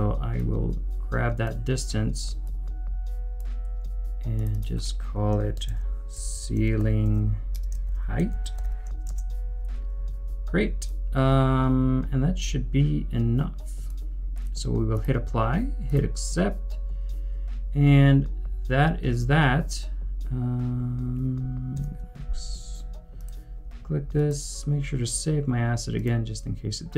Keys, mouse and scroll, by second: 4.5 double click, 5.4-9.1 typing, 21.7 u.